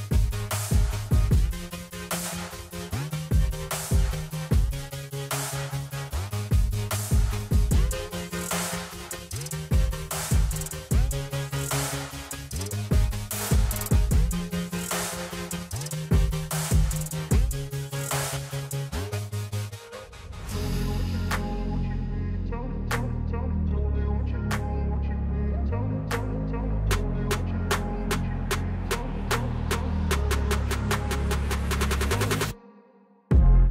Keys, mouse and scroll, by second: 0.7-6.1 shift+drag, 9.4 scroll up 1, 10.3 click, 12.2-14.0 drag, 12.2 scroll up 1, 14.0 alt+scroll up 1, 14.3 ctrl+z, 15.2 ctrl+z, 16.7 click, 17.2 alt+scroll up 1, 18.4-19.7 alt+shift+drag, 19.7-20.1 scroll down 1, 20.4-24.7 drag, 26.0-27.8 alt+drag, 28.0 scroll down 1, 28.8 click, 29.3-29.7 scroll up 1, 29.7 click, 30.8-33.6 drag.